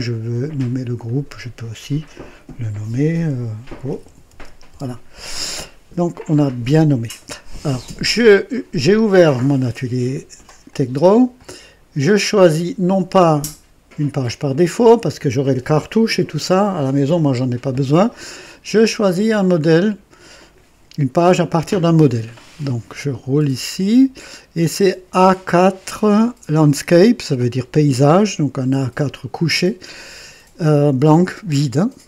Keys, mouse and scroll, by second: 0.3 click, 1.0 click, 1.1 typing, 2.5-4.7 typing, 8.7 click, 10.6 click, 21.3 click, 22.9 scroll up 1, 23.5-23.8 scroll down 1.